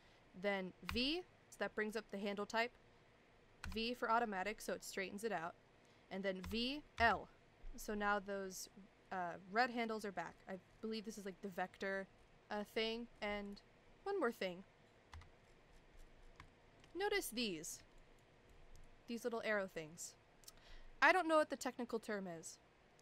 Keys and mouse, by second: 0.9 v, 6.4 v, 13.4 click, 15.1 KP_5, 16.5 shift+middle click, 17.6 shift+middle click, 18.0 click, 18.6 click.